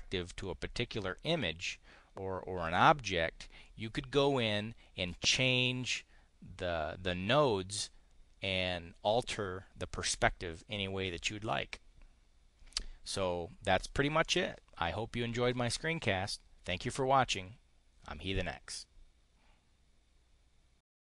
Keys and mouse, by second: 14.1 click.